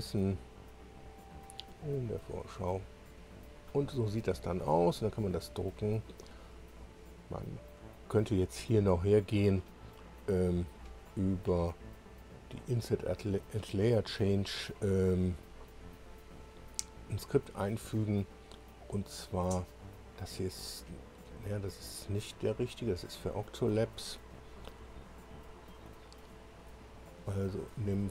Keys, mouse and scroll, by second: 1.2 click, 3.1-3.6 scroll up 1, 7.3 click, 8.4-9.6 drag, 11.0 click, 25.7 click, 26.7 click.